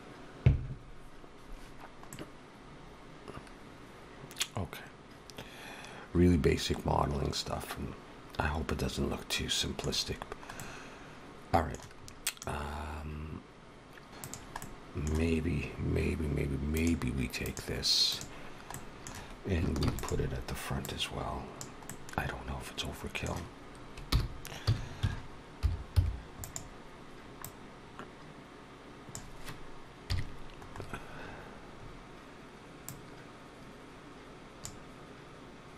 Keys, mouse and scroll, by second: 1.9 middle click, 10.1 scroll down 1, 10.4 middle click, 11.8-13.1 scroll up 3, 12.2 middle click, 14.1 middle click, 14.1 click, 14.1 scroll down 2, 14.4 middle click, 16.6 click, 18.6 middle click, 19.7 shift+d, 20.7 click, 21.7 middle click, 24.0 r, 27.3 click, 29.9 KP_3, 30.6-31.5 scroll up 7, 31.9 scroll up 2, 32.7 click.